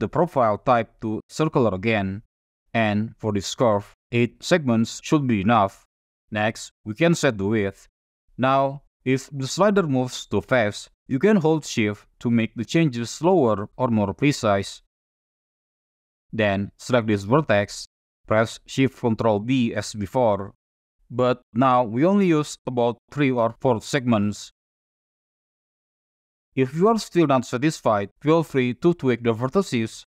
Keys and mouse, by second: 4.0-5.2 drag, 7.0-15.6 drag, 17.4 click, 18.6 ctrl+shift+b, 25.2 click, 27.7 click, 28.4 ctrl+click, 29.2 click.